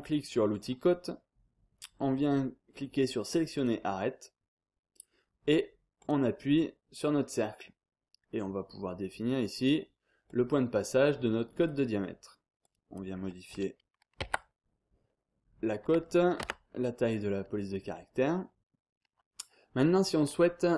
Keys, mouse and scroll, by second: 0.5 click, 3.5 click, 6.0 click, 10.3 click, 11.6 click, 12.6 click, 14.2 5, 16.4 Tab, 17.7-18.3 scroll up 2, 18.3 scroll down 2, 18.6-18.9 scroll up 2, 18.9-19.3 scroll down 2, 19.3-19.8 scroll up 2.